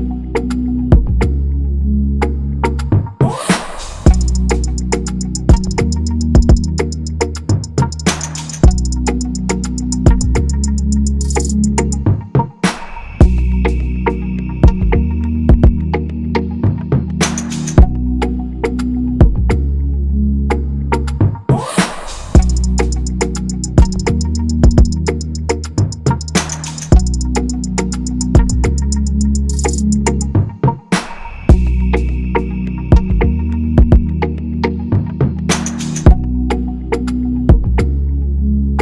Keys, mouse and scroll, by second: 23.1 shift+Up, 24.4 shift+Down, 31.9 double click, 35.5 double click.